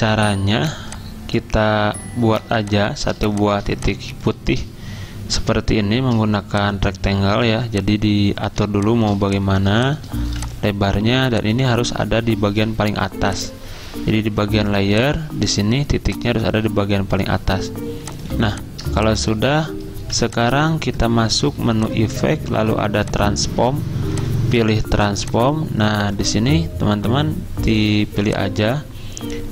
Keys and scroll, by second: 2.4 z, 10.3 v, 18.4 z, 20.0 v.